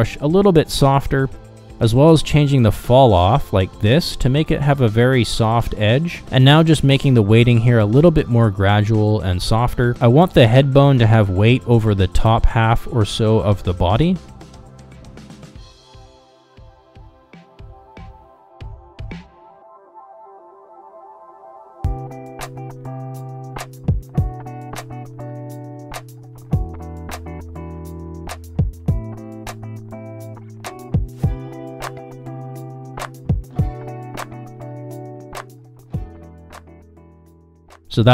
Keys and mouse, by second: 0.9-2.3 drag, 2.5 click, 4.8-8.6 drag, 9.6 f, 11.3-12.4 drag, 14.3 click, 15.2 click, 15.9 f, 16.9 click, 17.6 click, 18.4-19.8 drag, 20.5 f, 20.9-22.7 drag, 22.7 click, 23.0 click, 23.6 click, 24.0 click, 24.3 click, 24.7 click, 25.5-26.6 drag, 26.8 click, 27.4 shift+middle click, 27.6 click, 28.8 click, 29.3 click, 30.3 click, 31.1 click, 31.4 click, 32.4 click, 33.1 click, 33.6 f, 33.9 click, 34.6 click, 35.1 shift+middle click, 35.4 ctrl+Tab, 37.8 click.